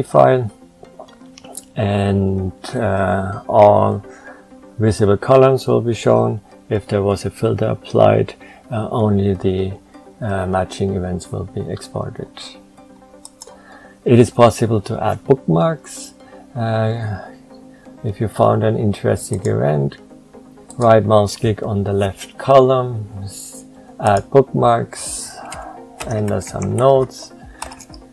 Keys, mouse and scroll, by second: 25.6-27.1 typing.